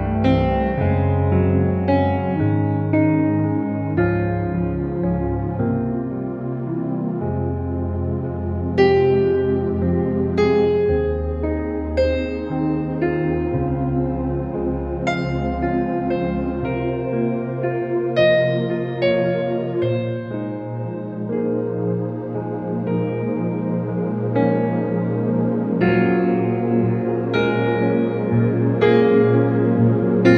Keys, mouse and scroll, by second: 0.2 click, 5.3 space, 5.5 click, 5.6 space, 7.4 ctrl+=, 8.1 alt+click, 8.2 alt+click, 9.5 click, 10.5 space, 10.7 click, 10.9 space, 11.5 alt+click, 15.4 click, 17.8 space, 18.0 click, 18.1 space, 18.9 alt+click, 21.4 space, 21.6 click, 21.7 space, 22.4 space, 22.7 ctrl+-, 23.4 shift+w, 23.8-24.2 click, 24.9 space, 26.0 ], 26.3 ], 26.6 ], 27.7 space, 27.8 click, 28.0 space, 28.4 ctrl+=, 28.9 shift+l, 29.6 alt+click.